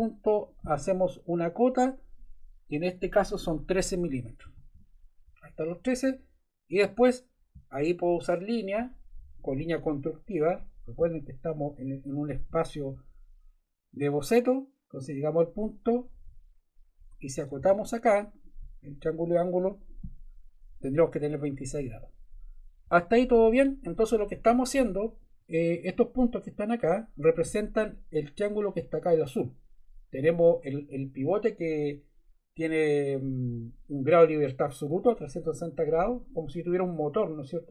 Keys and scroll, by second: 4.1 1, 4.4 3, 4.7 Return, 16.9 Escape, 17.5 d, 22.8 Return.